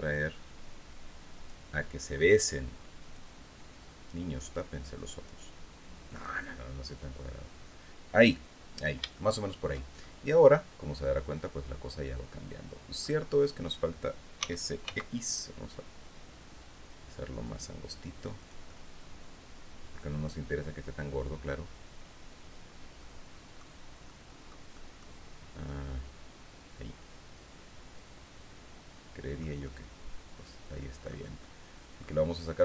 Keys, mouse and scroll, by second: 2.6-4.9 drag, 5.7-8.0 drag, 8.2-8.5 scroll down 2, 8.6 shift+middle click, 9.5-12.7 shift+middle drag, 13.9 s, 14.3 x, 17.9-23.3 drag, 23.6 middle click, 24.3 middle click, 25.1-29.1 middle drag, 29.1-30.7 middle drag, 30.9 middle click, 32.2-32.6 drag.